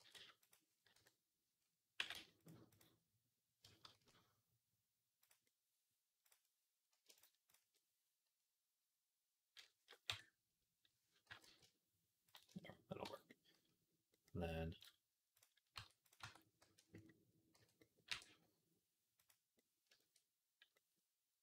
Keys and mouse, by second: 0.8 KP_1, 1.8 g, 3.7 shift+s, 5.4-7.0 middle drag, 6.1 click, 7.0 shift+click, 7.4-11.1 shift+middle drag, 9.9 KP_1, 11.1 g, 12.9 Tab, 12.9-20.7 middle drag, 15.6 Tab, 15.9 click, 16.1 Tab, 16.5 a, 17.4 f, 17.9 e.